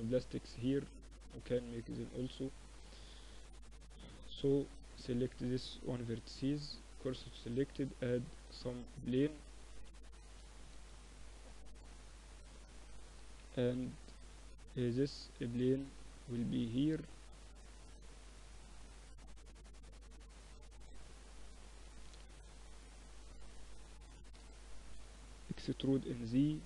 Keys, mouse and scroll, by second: 0.7-3.1 middle drag, 3.1-6.0 right drag, 3.6 Tab, 5.0 shift+s, 5.7 Tab, 6.2 shift+a, 9.1 s, 10.1 s, 12.3 KP_Decimal, 13.4-14.4 middle drag, 14.4-16.1 drag, 17.0 Tab, 17.5-18.5 drag, 18.5 middle click, 19.8 click, 20.6 a, 20.9 a, 21.8-24.2 drag, 24.2-26.2 middle drag, 24.8 e.